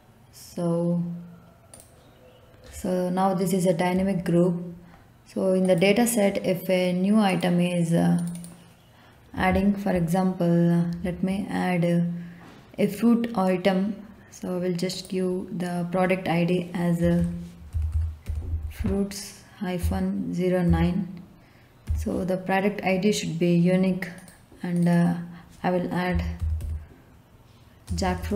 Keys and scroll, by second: 16.7-20.6 typing, 21.8 9, 25.8-27.8 typing.